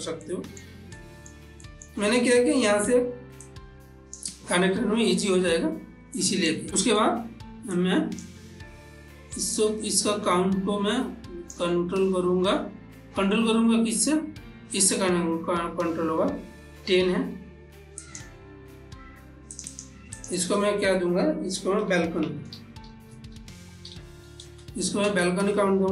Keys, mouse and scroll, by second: 0.2 middle click, 0.9 ctrl+middle click, 3.7-4.3 drag, 5.9 click, 6.2-7.7 ctrl+middle drag, 7.7-9.6 drag, 9.6-14.9 drag, 18.0 click, 19.5 click, 22.2 click, 22.3-24.4 typing.